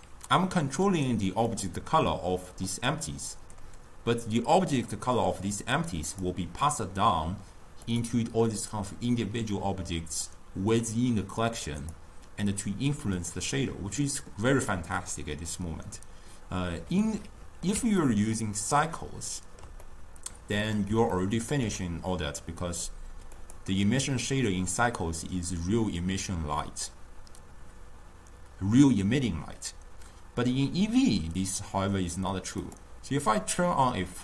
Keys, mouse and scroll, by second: 1.8 click, 13.0 click, 15.8-30.9 middle drag, 32.8 click.